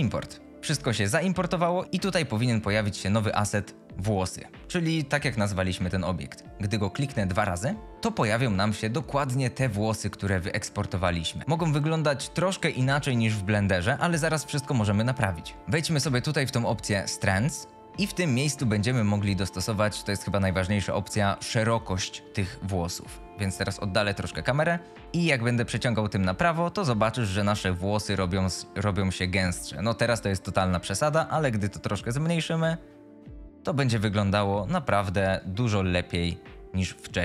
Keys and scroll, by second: 0.6 F22, 7.9 F22, 24.1 F22.